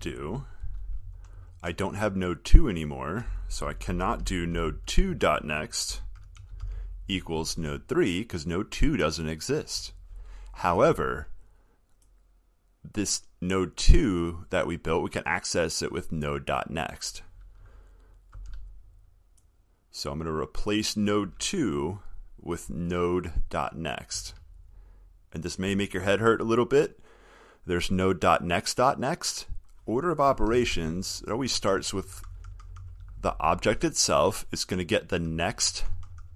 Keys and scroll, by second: 0.9 ctrl+/, 18.6 ctrl+c, 24.4 ctrl+v.